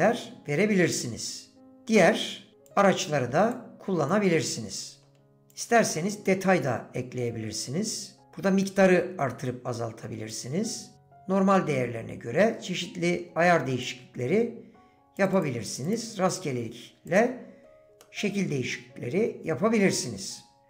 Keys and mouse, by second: 1.6-3.8 drag, 4.7 click, 6.9-14.8 drag, 18.0-19.7 drag.